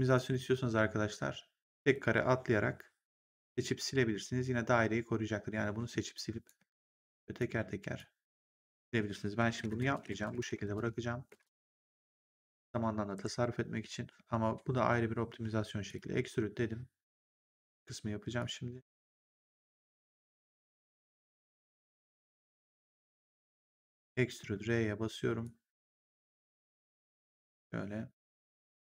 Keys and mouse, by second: 1.6 click, 5.7 Delete, 6.0 click, 6.5 Delete, 7.0 click, 7.4 Delete, 7.9 click, 8.3 Delete, 9.5 ctrl+z, 11.9 right click, 13.0 ctrl+1, 15.8 click, 18.3 click, 23.5 click, 24.3 r, 25.3 click.